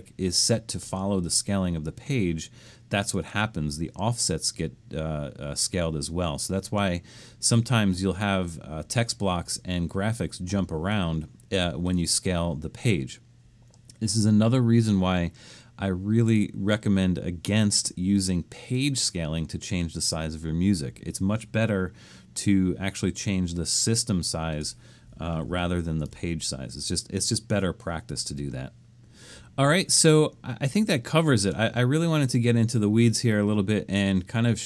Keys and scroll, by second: 25.5 super+z, 26.0 super+z.